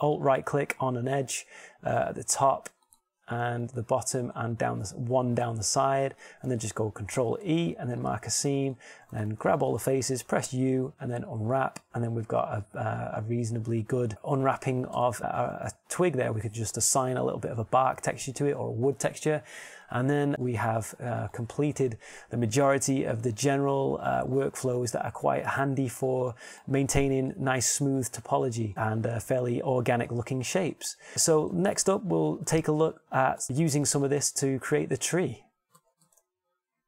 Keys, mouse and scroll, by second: 0.4-1.4 drag, 1.6 middle click, 4.8-5.8 drag, 9.2 ctrl+e, 11.0 a, 11.2 a, 12.5 u, 16.8 Tab, 20.4 middle click, 27.0 s.